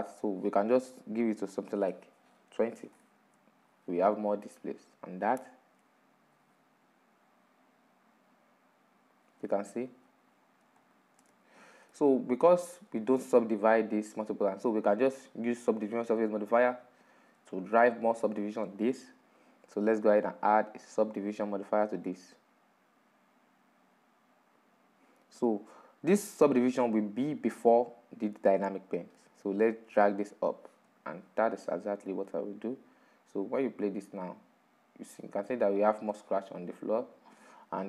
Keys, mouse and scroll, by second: 3.6-6.6 drag, 7.0-10.7 drag, 11.4-11.9 drag, 11.9-12.6 middle drag, 12.6-13.2 scroll up 6, 13.2-13.9 shift+middle drag, 13.9-14.4 scroll down 5, 14.4-21.6 middle drag, 21.6 click, 22.3-25.4 drag, 31.6 click, 33.3-34.3 middle drag, 34.3-37.8 drag.